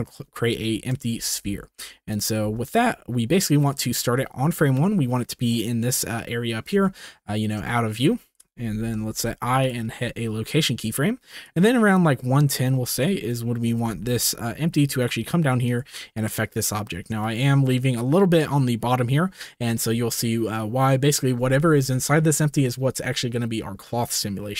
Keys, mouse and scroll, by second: 0.7 shift+middle drag, 1.1 s, 2.4 g, 6.8 shift+middle drag, 7.6-7.9 shift+middle drag, 8.8 i, 11.4-12.5 drag, 13.2 shift+click, 13.8 g, 17.2 shift+middle drag.